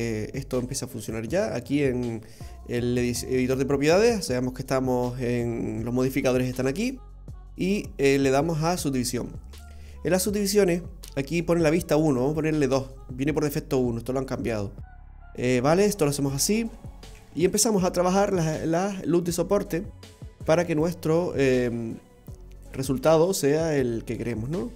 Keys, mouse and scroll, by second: 1.0 click, 7.1 click, 12.3 click, 14.0-14.3 scroll up 2, 14.3 middle click, 15.5-16.0 scroll up 2, 17.1 ctrl+r, 20.4 ctrl+r, 23.0 ctrl+r.